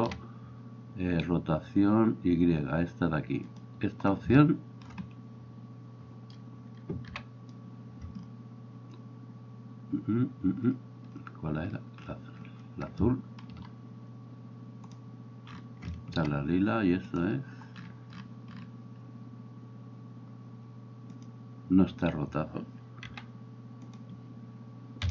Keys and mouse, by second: 3.7-14.9 middle drag, 7.1 l, 14.9-23.1 drag, 23.1-25.1 middle drag, 23.1 r.